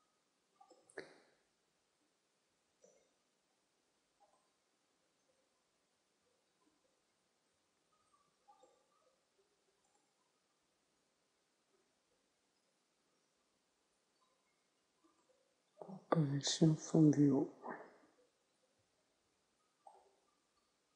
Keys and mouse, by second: 1.0-3.2 drag, 2.4 Tab, 3.2 ctrl+a, 5.8 u, 7.0 Tab, 7.9 u, 14.0 u, 16.1 u, 20.8-20.9 drag, 20.8 s.